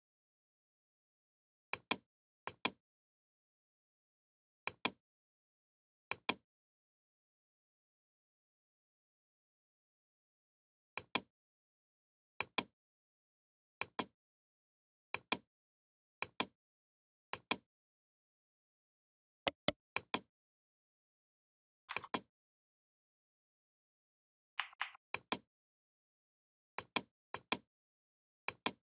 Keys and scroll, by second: 24.3 a.